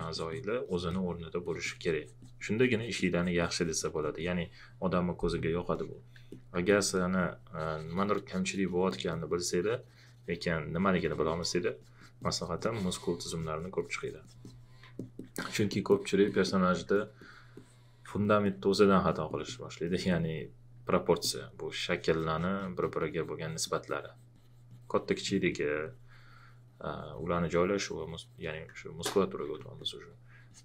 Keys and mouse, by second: 1.4 alt+click, 6.3 click, 6.6 alt+click, 8.9 alt+click, 14.9 alt+click, 21.2 alt+click.